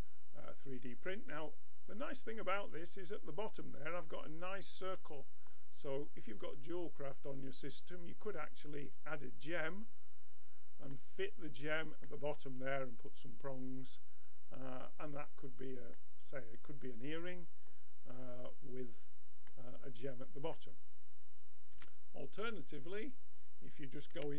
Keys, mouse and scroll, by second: 2.5-5.1 middle drag, 7.2-10.0 drag, 11.0-14.1 middle drag, 15.6 middle click, 21.7 x, 23.3-24.3 drag, 24.2 Tab.